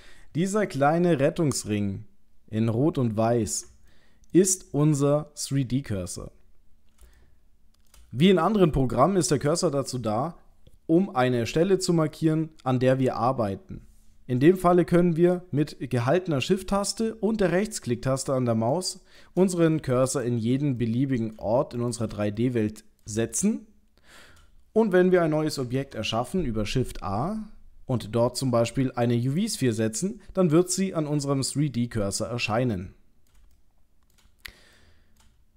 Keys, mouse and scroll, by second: 3.9 middle click, 4.7 scroll up 4, 6.1-6.4 scroll down 2, 6.4-7.0 scroll down 8, 7.1 shift+middle click, 8.2 middle click, 9.0 shift+middle click, 18.7 shift+right click, 20.8 middle click, 21.8 shift+right click, 22.4 middle click, 23.3 shift+middle click, 25.7 shift+a, 30.1 middle click, 33.6 shift+middle click, 34.7 middle click.